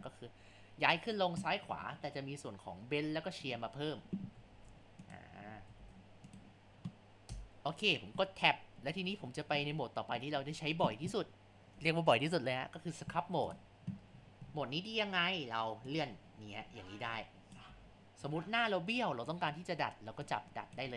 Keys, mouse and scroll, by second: 4.5 shift+s, 5.8 shift+s, 7.3 Tab, 14.2 scroll down 3, 14.5 scroll up 4, 15.9-17.7 drag, 17.7 ctrl+z, 20.2-20.9 drag.